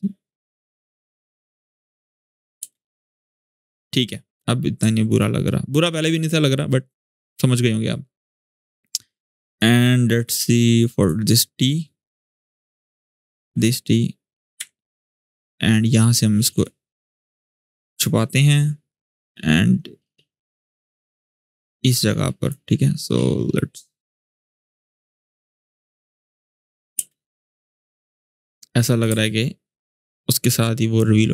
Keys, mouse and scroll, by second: 2.4 space, 3.6 click, 5.2-6.4 shift+scroll down 1, 7.0-9.5 drag, 13.1 click, 14.4 u, 16.3-17.9 drag, 19.0-20.6 drag, 23.3-25.2 drag, 26.1-26.7 click, 26.7 space, 28.2-28.9 click, 28.8 space, 30.0-31.3 drag.